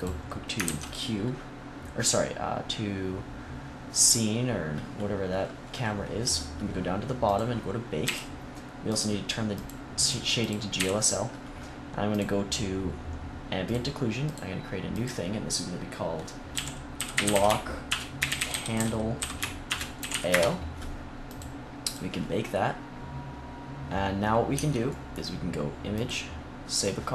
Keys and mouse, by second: 0.5 ctrl+s, 7.9 n, 10.6 n, 14.1-21.2 drag, 21.7-24.4 drag, 24.4 Tab, 25.8 click.